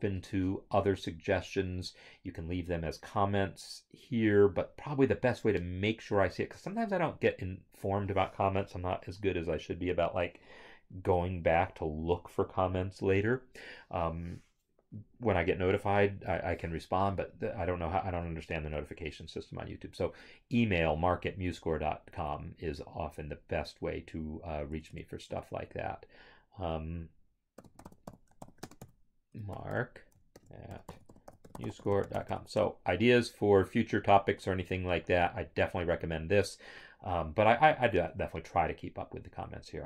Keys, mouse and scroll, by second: 22.0 alt+Tab, 25.0 alt+Tab, 27.5-32.3 typing, 32.5 Return, 38.8 click.